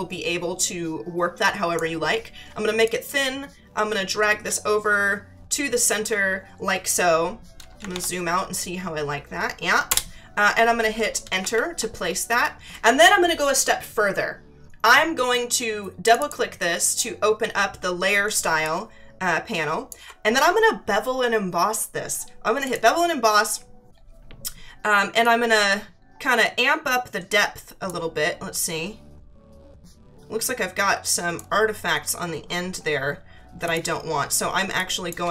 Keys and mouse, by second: 2.8 click, 4.4 click, 9.9 Return, 9.9 KP_Enter, 11.4 ctrl+=, 16.0 click, 18.4 space, 18.6 click, 19.9 space, 22.6 click, 25.2 click, 28.5 click, 33.6 click, 34.6 space, 34.8 click.